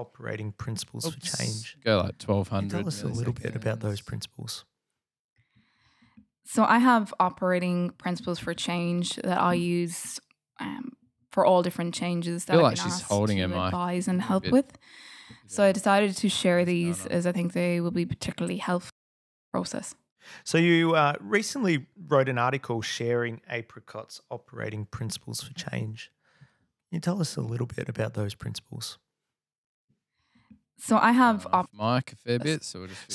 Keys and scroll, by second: 0.0-0.5 typing, 1.2 Return, 2.0-4.3 typing, 6.8-8.0 typing, 9.2 typing, 12.3 super+e, 13.7 super+,, 17.8 Delete, 17.9-19.4 typing, 21.6 typing, 23.8 BackSpace, 25.4 f, 27.0 Delete, 27.6 F8, 30.7 F7.